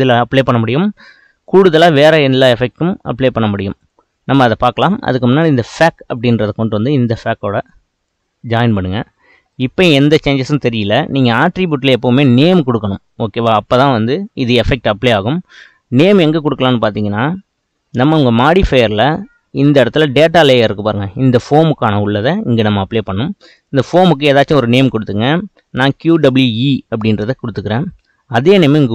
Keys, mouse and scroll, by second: 8.1 click, 9.5-27.4 middle drag, 27.4 click.